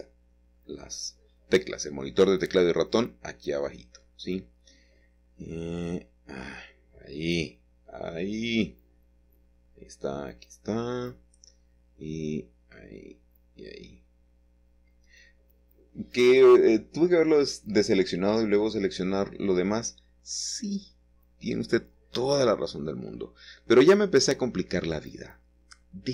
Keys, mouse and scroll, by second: 0.2-2.7 shift+middle drag, 3.3 c, 4.7 Escape, 6.8-7.8 shift+middle drag, 8.1 c, 8.5-10.9 middle drag, 10.6 Escape, 11.1-12.6 middle drag, 12.6 c, 13.0-14.7 middle drag, 15.2 Escape, 15.9-17.6 middle drag, 17.9-19.2 middle drag, 19.7 middle click, 20.6 Escape, 23.9 c, 24.3-25.4 middle drag, 24.9 Escape, 25.4-26.1 middle drag.